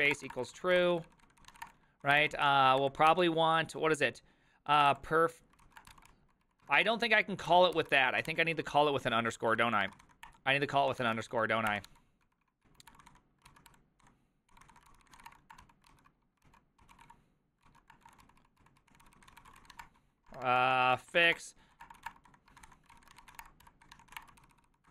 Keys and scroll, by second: 0.0-24.9 typing, 7.8 ctrl+c, 8.6 Left, 9.2 Left, 16.5 ctrl+p, 17.7 ctrl+c.